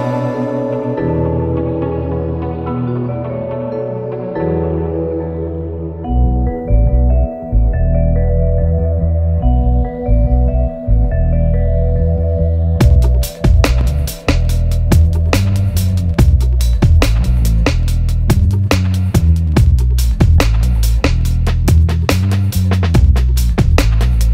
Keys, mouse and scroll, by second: 4.3-5.0 scroll down 1, 5.1-6.8 middle drag, 7.3 scroll up 1, 7.8 scroll down 1, 8.6-22.6 drag, 22.6 scroll down 1, 23.8-24.3 drag.